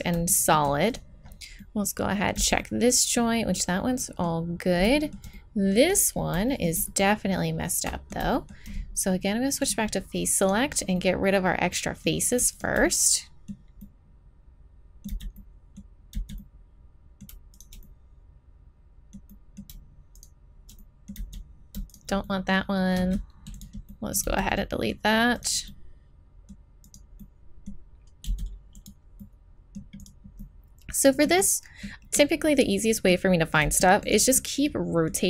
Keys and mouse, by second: 0.9 middle click, 2.4 z, 7.9-9.0 middle drag, 9.6-11.5 middle drag, 11.9 click, 12.5 middle click, 15.1 z, 16.1 z, 17.5-19.3 middle drag, 20.2-21.2 middle drag, 21.2 z, 22.4 middle click, 23.0 x, 24.2 z, 24.8-26.4 right drag, 28.3 x, 29.7-30.8 drag, 30.8 middle click, 31.9 click, 32.4 click, 33.6 x, 35.0-35.2 right drag.